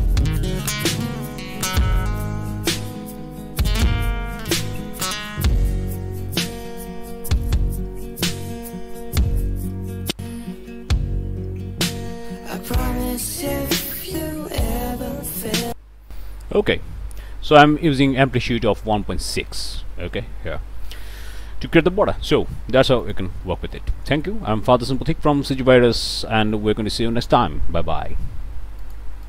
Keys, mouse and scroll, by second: 15.6 click, 22.1 scroll down 1, 23.0 click, 23.4 click, 24.0 scroll up 2, 24.4 middle click, 28.9 click, 29.2 click.